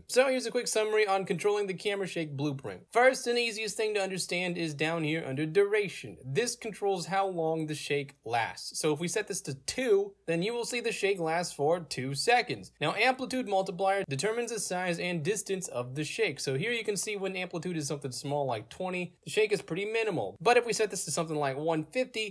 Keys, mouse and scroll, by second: 2.8 click, 6.9 click, 9.2 2, 9.9 Return, 10.1 click, 10.4 e, 12.8 click, 15.7 click, 16.7-17.6 typing, 18.4 click, 18.7 e, 21.0 click, 21.3-22.3 typing.